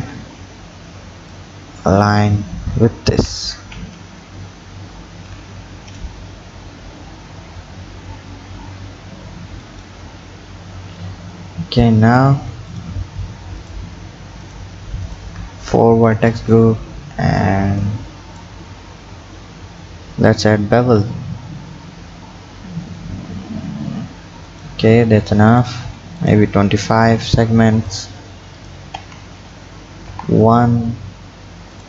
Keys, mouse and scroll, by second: 0.2 scroll up 5, 1.3-3.1 drag, 3.1 g, 10.1 scroll down 6, 11.3 click, 12.7 click, 13.6 shift+click, 14.4 shift+click, 15.0 shift+click, 16.0 KP_7, 16.5-17.8 scroll up 4, 17.8-18.9 drag, 18.9 scroll up 5, 20.8 ctrl+b, 26.2-28.0 drag, 28.6 click, 29.0 Tab, 29.4 scroll down 5, 30.1 KP_1, 31.7 drag.